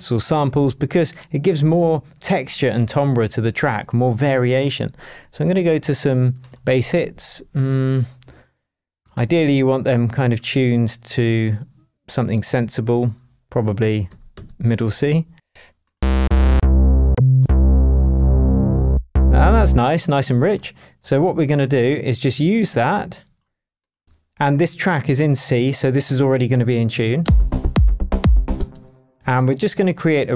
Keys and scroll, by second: 6.9 Right, 14.0 Down, 14.3 Right, 16.2 Down, 17.4 Up, 19.7 space, 27.2 space, 28.5 space.